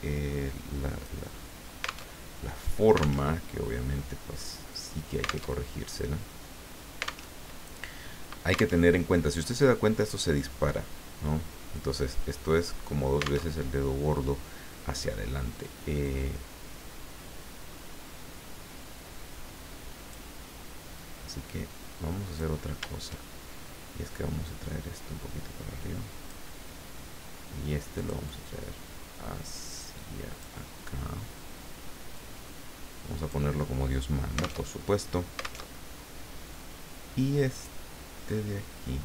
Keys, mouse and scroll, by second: 2.1 alt+Tab, 3.2 alt+Tab, 5.6 alt+Tab, 7.3 alt+Tab, 8.8 alt+Tab, 13.8 alt+Tab, 16.0-20.3 drag, 21.0-22.8 drag, 24.5-26.4 drag, 27.9-30.4 drag, 32.1-33.5 drag, 34.7 alt+Tab, 35.6 alt+Tab, 37.5 click, 38.2-39.0 drag.